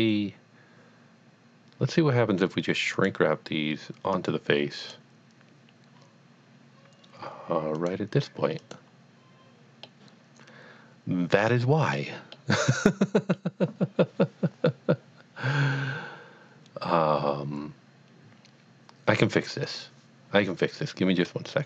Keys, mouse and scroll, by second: 3.0 click, 3.1 click, 4.1 click, 4.8 click, 7.7 click, 8.0 click, 8.6 click, 9.9-12.7 middle drag.